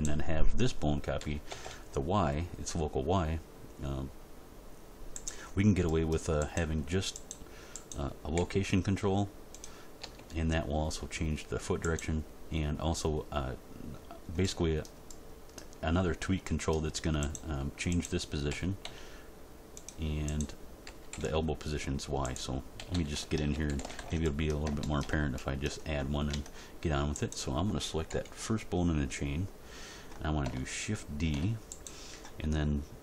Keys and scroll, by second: 1.2 r, 1.5 y, 8.4 g, 10.0 r, 18.5 r, 18.8 x, 20.8 r, 21.1 y, 22.8 a, 23.5 alt+r, 23.7 alt+g, 24.0 alt+s, 26.3 Tab, 28.0 End, 31.2 shift+d.